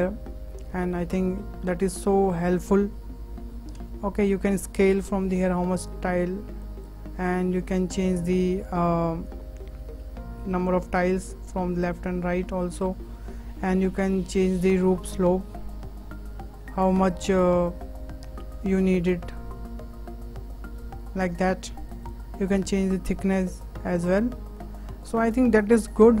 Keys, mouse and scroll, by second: 0.9-1.6 middle drag, 1.6 scroll up 3, 2.2-2.5 scroll down 2, 2.5-4.6 middle drag, 4.6-6.8 drag, 7.4-9.5 drag, 9.5 scroll down 4, 9.8-11.0 middle drag, 11.0-12.8 drag, 15.1-18.2 drag, 22.5-24.1 drag, 24.7-25.0 scroll down 3, 25.0-25.4 shift+middle drag, 25.4-25.8 scroll up 4, 25.8-26.2 shift+middle drag.